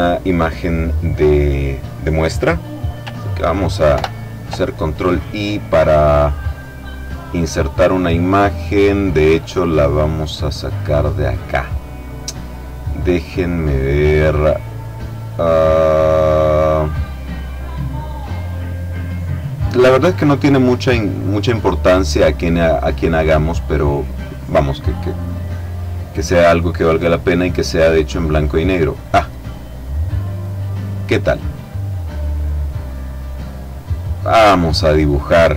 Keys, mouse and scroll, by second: 4.2 ctrl+i, 7.3 click, 10.9 click, 12.3-13.2 scroll down 1, 13.2-13.8 scroll down 1, 14.1-14.7 scroll down 1, 15.8-16.6 scroll down 1, 16.6 scroll up 1, 16.8-17.5 scroll down 1, 17.5 scroll up 1, 17.6-18.3 scroll down 1, 18.5-19.0 scroll down 1, 20.2-21.2 scroll down 1, 22.3-23.0 scroll down 1, 25.8-26.7 scroll down 1, 30.3 click, 31.8 click, 33.1 click, 33.9-35.5 drag.